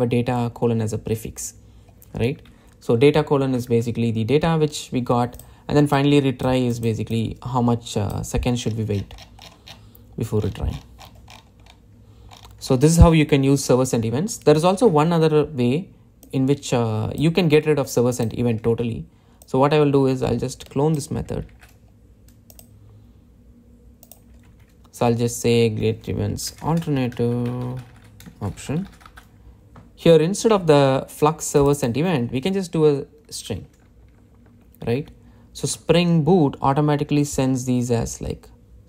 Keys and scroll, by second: 22.5 super+d, 33.9 Delete.